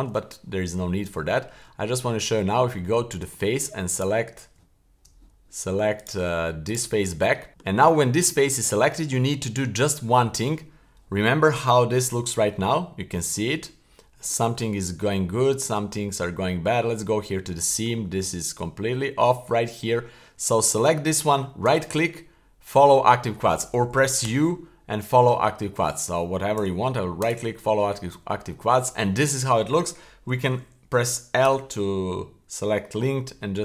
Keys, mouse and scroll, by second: 1.3 shift+middle click, 2.2 Tab, 3.9 right click, 4.5 Tab, 6.0 right click, 6.6 right click, 7.5 shift+middle click, 7.5 scroll up 3, 8.4-8.9 scroll down 2, 9.0 shift+middle click, 9.8-10.6 scroll down 1, 11.5-12.0 middle drag, 12.0-12.4 scroll down 1, 12.4-14.3 middle drag, 15.0-15.4 middle drag, 15.6 middle drag, 16.1-16.5 scroll up 2, 16.5 middle click, 17.1-17.5 scroll up 1, 17.5-17.8 shift+middle drag, 18.0 middle click, 18.4-19.0 scroll down 2, 19.0 middle click, 21.6 w, 24.2 u, 26.6 w, 28.0-28.5 scroll down 2, 31.4 l, 33.1 g.